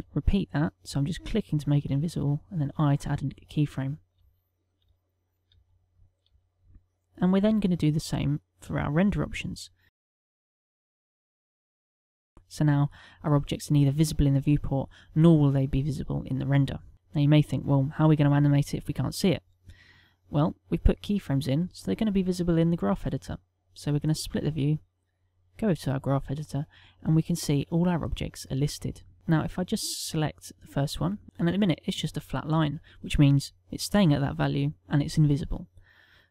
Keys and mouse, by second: 1.2 click, 1.7 i, 2.6 click, 3.0 i, 3.9 click, 4.6 click, 5.2 click, 5.9 click, 10.0 click, 10.5-12.0 typing, 10.7 click, 11.0 click, 11.2 click, 11.6 click, 11.9 click, 16.9 middle click, 21.7 click.